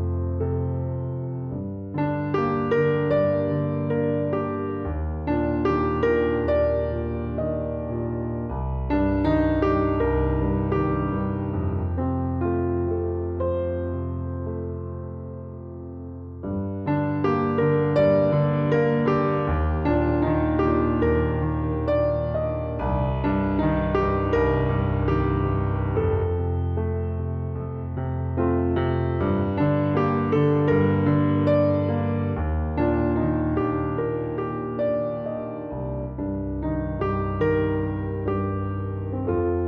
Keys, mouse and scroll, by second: 6.6 s, 7.7 s, 8.9 s, 11.1 click, 11.3-20.2 middle drag, 15.6 s, 16.6-20.2 drag, 17.8 Tab, 20.2-25.6 right drag, 21.1 click, 22.4 click, 25.2 click, 28.4 click, 28.4-39.6 right drag, 35.7-36.8 drag.